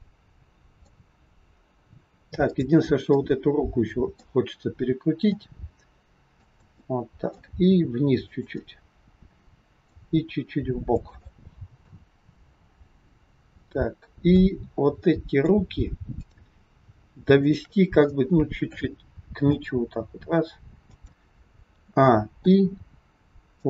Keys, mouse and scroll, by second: 1.3-2.0 scroll up 2, 2.3 click, 3.0 middle click, 5.3 r, 6.7 middle click, 7.4 r, 8.4 scroll up 1, 8.5 middle click, 9.9 r, 11.2 middle click, 12.8 scroll down 2, 13.4 middle click, 14.9 middle click, 16.0 click, 17.4 shift+click, 18.0 middle click, 19.5 g, 21.6 a, 22.3 i.